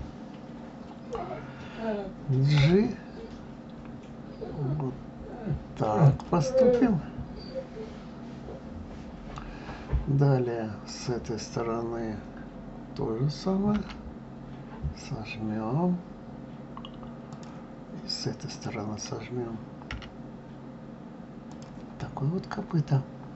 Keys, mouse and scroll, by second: 6.4-9.4 middle drag, 10.7 click, 13.5 g, 18.3 click, 19.7 g, 21.8-23.3 middle drag.